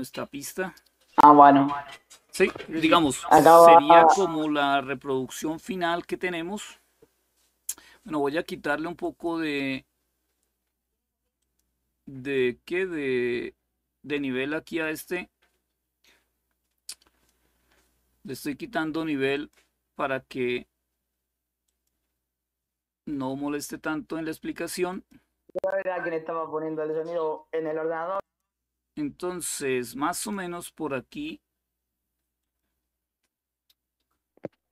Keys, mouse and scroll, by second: 0.0 click, 4.1 click, 8.7 click, 11.1 click, 12.1-17.6 drag, 19.1 click, 21.4 click, 24.6 click, 27.9 click, 29.8 click, 32.1 click.